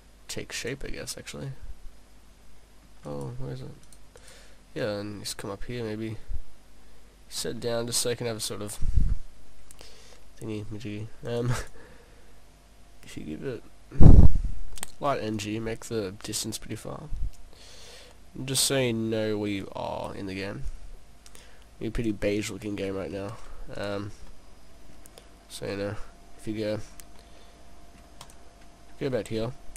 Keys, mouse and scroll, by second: 0.9 middle click, 3.1 right click, 3.8 right click, 4.8 right click, 4.8 click, 6.2 click, 7.6 middle click, 9.2 middle click, 11.3 click, 11.6 click, 13.1 click, 15.4 click, 17.4 click, 19.6 click, 20.7 click, 22.4 scroll down 2, 23.3 shift+s, 24.3 middle click, 25.4-25.8 scroll up 4, 26.7-27.2 scroll down 3, 27.2 middle click, 27.8 middle click, 28.3 click, 28.7-29.4 scroll up 2.